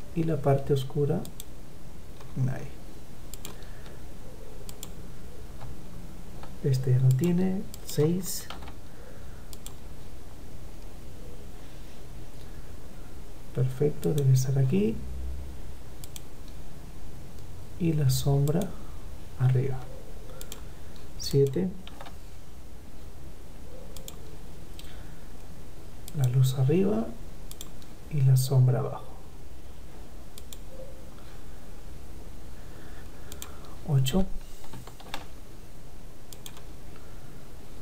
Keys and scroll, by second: 7.2 ctrl+v, 7.7 ctrl+v, 20.6 ctrl+v, 21.3 ctrl+v, 34.1 ctrl+v.